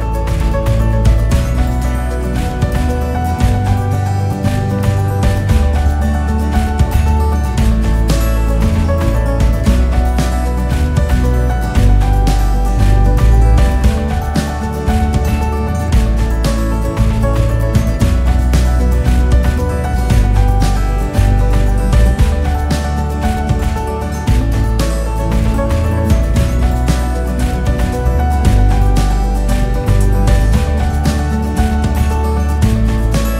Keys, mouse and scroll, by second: 1.1 s, 3.9 g, 8.2 click, 9.5 shift+d, 14.1 s, 15.3 g, 18.2 click, 18.7-19.0 scroll up 1, 19.0-19.8 scroll down 1, 19.8-21.1 KP_6, 21.2 KP_6, 21.3 KP_6, 22.2 KP_4, 22.8 click, 23.7 g, 26.9 click, 27.7 KP_1, 29.1 click, 30.2 shift+d.